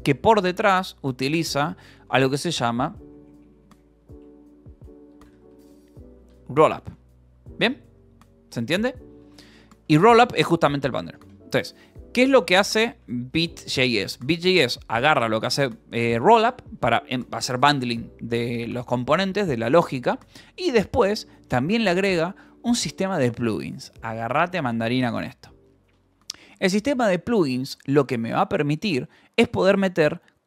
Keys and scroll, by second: 0.0-2.4 typing, 4.4-6.7 typing, 7.2 Escape, 8.4-10.0 typing, 11.6 k, 12.7 j, 13.5 Escape, 14.0 k, 14.7 shift+j, 15.7 Escape, 20.7 k, 21.6 shift+v, 25.1 Escape, 25.6-28.8 typing, 27.0 Escape, 29.1 Escape.